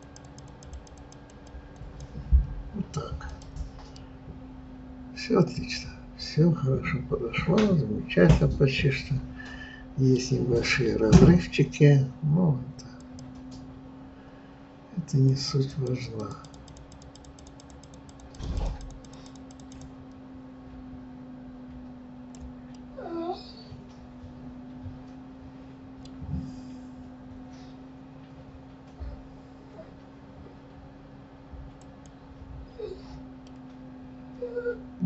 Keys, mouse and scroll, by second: 3.4 click, 3.9-7.0 middle drag, 13.1-22.8 drag, 22.8-25.7 middle drag, 32.0-33.4 drag, 33.4-35.0 middle drag.